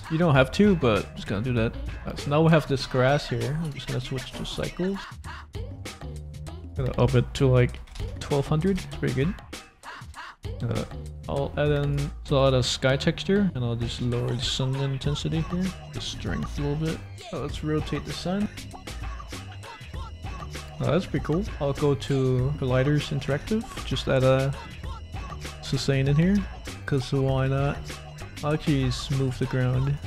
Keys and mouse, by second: 0.2 middle click, 1.0 ctrl+a, 1.4 middle click, 3.4 click, 3.9 click, 4.8 click, 6.2 click, 6.2 middle click, 6.2 right click, 6.6-8.9 drag, 8.0 0, 9.2 shift+middle click, 10.7 middle click, 11.8 click, 13.0 click, 13.9 click, 15.2 click, 18.4 click, 19.4 click, 19.9 click, 20.8 shift+click, 20.9 shift+middle click, 21.2 middle click, 21.4 click, 22.7 click, 22.7 middle click, 23.2 shift+a, 25.7 g, 25.9 z, 27.3-28.2 typing, 28.7 click, 29.2 click, 29.8 right click.